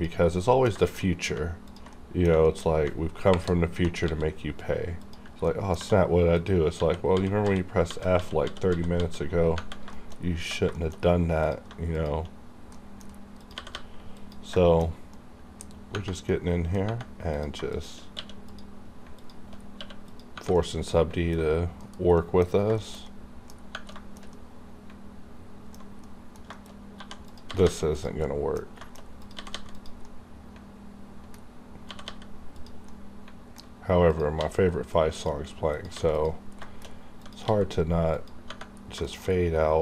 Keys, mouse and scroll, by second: 0.4 middle click, 0.8 shift+middle click, 1.0 scroll up 1, 1.7 ctrl+click, 1.9 ctrl+middle click, 2.4 shift+middle click, 2.6 scroll up 2, 3.2 ctrl+KP_Add, 4.0 x, 5.0 click, 5.4 middle click, 5.7 2, 6.3 click, 6.7 f, 7.6 scroll down 2, 7.9 f, 9.9 shift+scroll down 2, 10.2 scroll up 1, 10.7 shift+middle click, 11.0-11.4 scroll up 1, 11.4 click, 11.4 click, 11.9 shift+click, 12.4 scroll up 1, 12.7 middle click, 12.7 middle click, 13.4 click, 13.5 g, 13.7 g, 14.1 click, 14.2 click, 14.5 shift+middle click, 15.7-16.3 scroll down 2, 16.3 middle click, 17.3 click, 17.7 shift+click, 18.1 q, 18.4 click, 19.2 alt+click, 19.6 scroll down 1, 19.8 q, 20.0 click, 20.5 middle click, 21.4-21.8 scroll up 3, 21.8 KP_Decimal, 22.2 middle click, 22.5 scroll up 2, 22.8 shift+middle click, 23.5 scroll up 2, 23.9-25.9 shift+middle drag, 25.8 alt+scroll up 1, 26.0 middle click, 26.5 shift+middle click, 26.7 shift+scroll up 1, 26.9 1, 27.3 click, 27.5 g, 27.6 g, 27.9 click, 28.2 middle click, 29.2 click, 29.2 click, 29.3 g, 29.7 click, 30.0-31.9 middle drag, 31.9 g, 32.0 g, 32.5 click, 32.9 middle click, 34.1 click, 34.1 click, 34.4 g, 35.1 click, 35.9 g, 36.1 click, 36.6 shift+middle click, 36.8 shift+scroll down 1, 37.2 click, 37.2 click, 37.4 g, 38.0 click, 38.1 click, 38.9-39.5 scroll down 2, 39.0 shift+middle click.